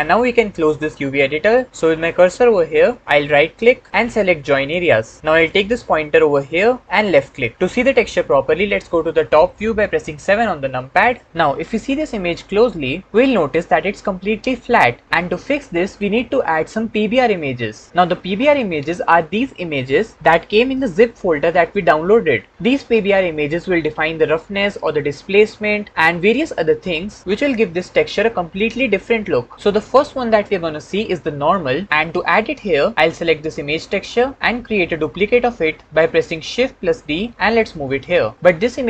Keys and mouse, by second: 3.4-7.3 middle drag, 10.1 KP_7, 33.2 click, 37.0 shift+d.